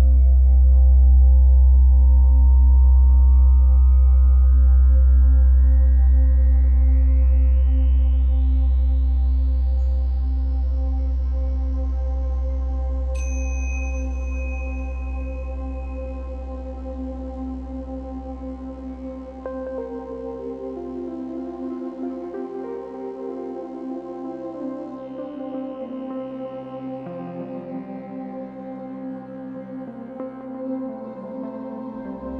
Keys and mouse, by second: 1.8 z, 3.3 z, 7.4 ctrl+z, 10.8 z, 12.4-13.4 typing, 13.4 alt+click, 14.6 click, 15.6 shift+Return, 16.4 shift+=, 17.6 click, 18.7-19.7 typing, 21.2 shift+z, 23.0 shift+click, 25.0 shift+click, 25.0 shift+Return, 25.7-27.4 typing, 28.6 click, 29.2-30.4 typing.